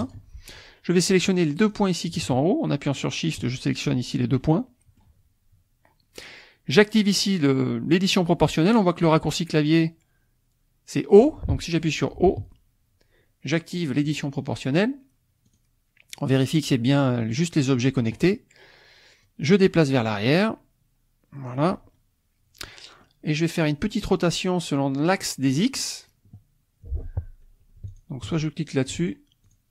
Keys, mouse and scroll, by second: 0.0 click, 1.6 click, 2.9 shift+click, 4.4 click, 12.4 o, 15.4 click, 19.2-21.7 drag, 23.0-24.2 drag, 27.9 shift+click, 29.1 shift+click, 29.4 shift+click.